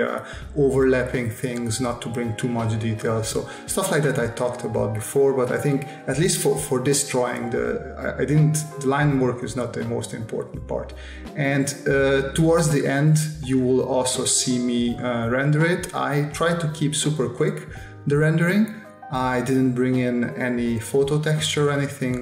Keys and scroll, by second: 0.7 space, 2.4 space, 3.3 space, 5.6 space, 7.6-9.9 typing, 11.9 space, 12.7 space, 14.5 space, 15.9 s, 17.2 space, 17.7 space, 21.0 space, 21.5 space, 22.1 s.